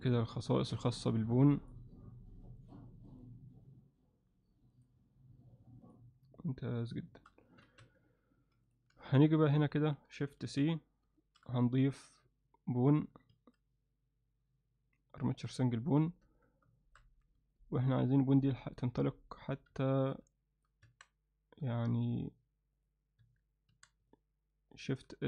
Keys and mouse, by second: 0.0 click, 0.7 click, 1.6 click, 2.6 click, 3.1 click, 4.8 click, 5.9 click, 7.1 shift+middle click, 7.5 ctrl+alt+middle click, 7.8 Tab, 8.3 x, 9.0 alt+shift+middle drag, 9.9 click, 10.5 shift+c, 11.2 shift+middle click, 13.3 shift+a, 16.3 Tab, 16.8 shift+middle click, 17.5-18.6 alt+middle drag, 19.1 alt+middle click, 19.8 ctrl+alt+middle click, 20.4 middle click, 20.9 Tab, 21.6 z, 22.2 click, 22.8 click, 23.3 Tab, 23.7 a, 24.1 alt+middle click.